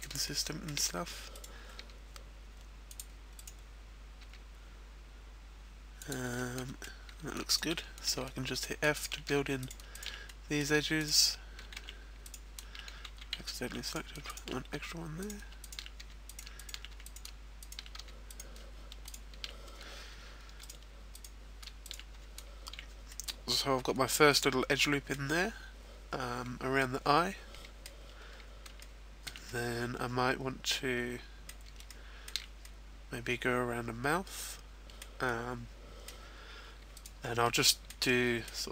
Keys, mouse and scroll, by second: 0.3 shift+middle click, 1.3 right click, 2.0 g, 2.9 click, 3.3 right click, 4.3 g, 6.1 click, 6.4 middle click, 7.3 shift+right click, 8.0 f, 8.6 right click, 8.9 shift+right click, 9.3 f, 9.6 right click, 9.9 shift+right click, 10.2 middle click, 10.7 f, 11.0 right click, 11.6 ctrl+z, 12.2 right click, 13.7 ctrl+z, 13.7 right click, 14.3 shift+right click, 14.7 f, 15.2 right click, 15.5 shift+right click, 15.9 f, 16.3 right click, 16.6 shift+right click, 16.9 f, 17.5 shift+right click, 18.0 f, 18.3 right click, 19.1 shift+right click, 20.1 f, 20.6 right click, 21.8 shift+right click, 22.1 f, 22.4-23.1 scroll down 2, 22.7 a, 23.1 middle click, 25.3-26.0 scroll down 1, 26.0-26.8 scroll down 4, 26.8 middle click, 28.1-28.7 scroll up 2, 28.8 shift+middle click, 29.5 middle click, 31.8 shift+middle click, 31.8-32.6 shift+scroll up 1, 32.6 middle click, 35.2 middle click, 36.9 right click, 37.3 middle click.